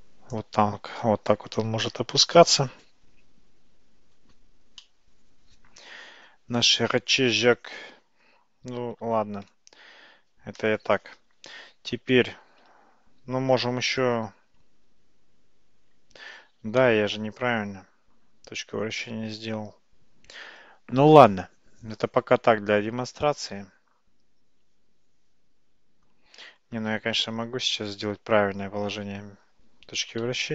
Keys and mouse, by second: 4.9-8.3 middle drag, 9.3 ctrl+z, 16.9-26.1 middle drag, 28.2 Tab, 30.3 a.